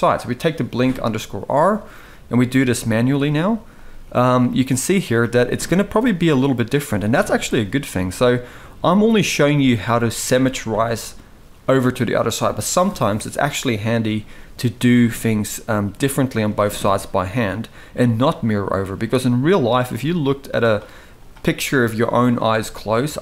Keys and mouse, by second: 0.6 shift+middle click, 1.7 g, 3.6 g, 4.8 drag, 5.4 g, 6.5 g, 7.7 g, 8.9 click, 9.2 g, 16.2 shift+middle click, 17.2 click, 17.7 g, 19.4 click, 19.6 g, 20.9 click, 21.4 middle click, 22.2 g.